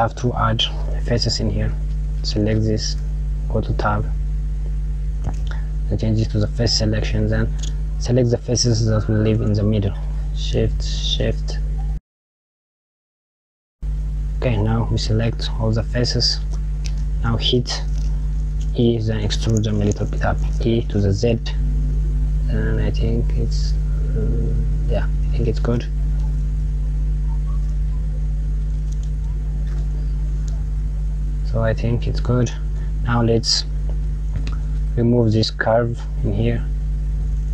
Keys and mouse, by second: 1.1 click, 2.6 Tab, 4.3 click, 6.1 click, 8.4 click, 9.9 shift+click, 10.7 shift+click, 11.8 click, 12.3 shift+click, 12.6 shift+click, 12.8 shift+click, 12.9 shift+click, 13.2 click, 13.5 shift+click, 13.6 shift+click, 13.8 shift+click, 14.7 click, 16.4-16.8 KP_Subtract, 18.4 click, 20.2 e, 25.2 KP_Add, 26.2 click, 26.9 click, 29.3 Tab, 29.9 KP_Subtract, 31.0 click, 36.6 click.